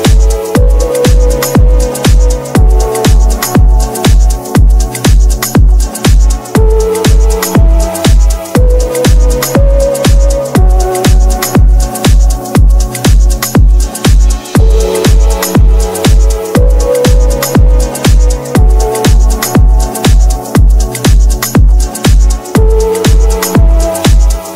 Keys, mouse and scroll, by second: 1.4 KP_5, 10.4 middle click.